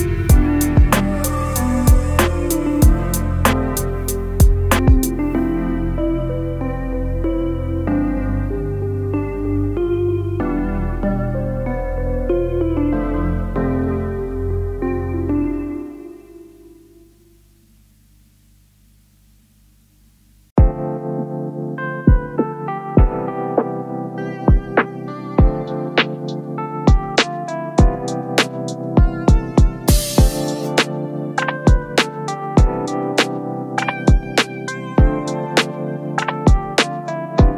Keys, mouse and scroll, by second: 15.7 double click, 17.1 double click, 17.2 double click, 28.0-28.5 scroll down 3, 29.0 scroll down 4.